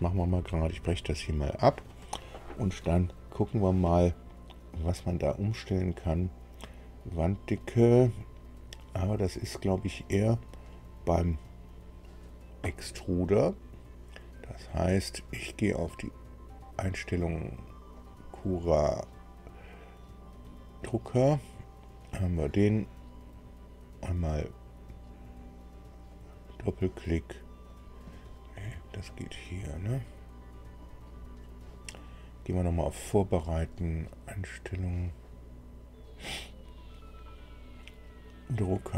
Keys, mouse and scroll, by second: 1.1 click, 5.1-9.8 drag, 15.8 click, 17.9 click, 20.8 click, 25.9 click, 27.7 click, 29.0 click, 30.8 click, 32.5 click, 33.6 click.